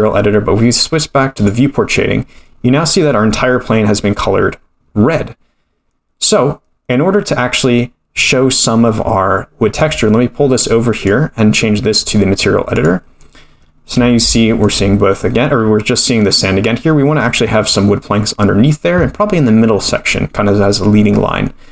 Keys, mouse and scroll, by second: 1.4 click, 9.8 click, 11.9-12.8 scroll down 3, 12.8 click, 12.8 scroll down 1, 13.5-14.2 scroll up 1, 14.2 scroll up 3, 14.3 shift+middle click, 15.6-16.5 scroll up 3, 16.5-16.8 scroll down 3.